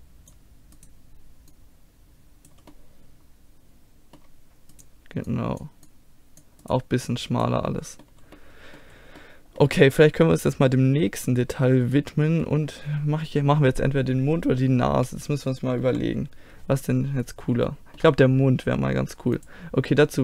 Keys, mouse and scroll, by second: 0.8 right click, 1.5-2.7 right drag, 2.7 middle click, 4.7-8.2 right drag, 5.3-8.2 drag, 7.7-9.0 middle drag, 11.9-14.4 middle drag, 15.0 z, 15.8 KP_1, 17.1-19.4 middle drag, 19.4-20.2 drag.